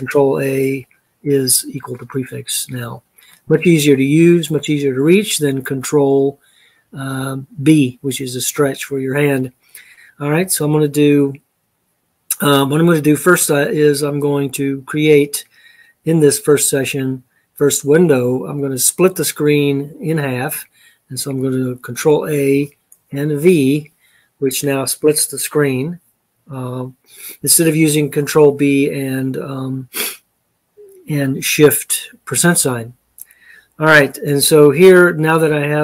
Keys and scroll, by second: 1.8 BackSpace, 1.9-2.6 BackSpace, 21.8 ctrl+a, 23.1 v.